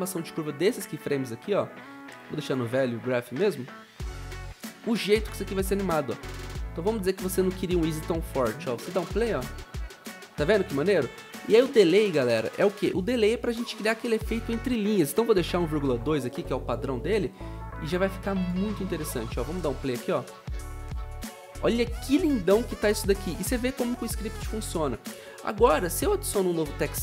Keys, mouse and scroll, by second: 8.8 0, 10.4 0, 15.2-16.8 typing, 19.9-20.6 typing, 21.7-22.4 typing, 24.1-24.8 typing.